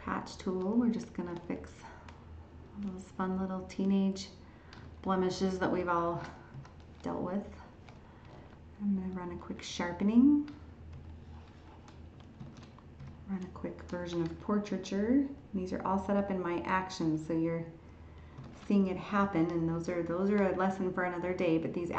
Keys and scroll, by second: 12.4 ctrl+shift+e, 18.4 ctrl+shift+e.